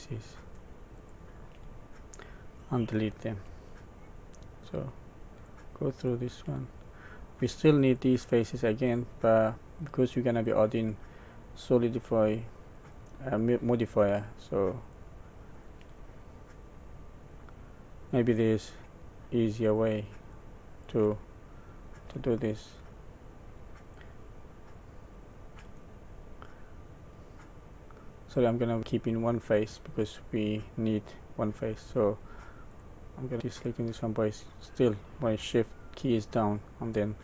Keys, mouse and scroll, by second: 0.1 shift+click, 0.9 shift+click, 1.8 middle click, 3.9 shift+click, 4.6 shift+click, 5.3 shift+click, 5.9 shift+click, 6.6 middle click, 7.8 shift+click, 8.5 shift+click, 9.7 shift+click, 10.4 shift+click, 11.1 middle click, 12.7 shift+click, 13.7 shift+click, 14.8 shift+click, 15.5 shift+click, 16.1 middle click, 18.4 shift+click, 19.5 shift+click, 20.2 shift+click, 20.7 shift+click, 21.2 middle click, 22.5 shift+click, 23.8 shift+click, 24.6 shift+click, 25.1 shift+click, 25.7 middle click, 26.6 middle click, 27.7 middle click, 28.8 middle click, 32.7 shift+click, 33.3 shift+click, 33.7 shift+click, 34.6 shift+click, 36.4 shift+middle click.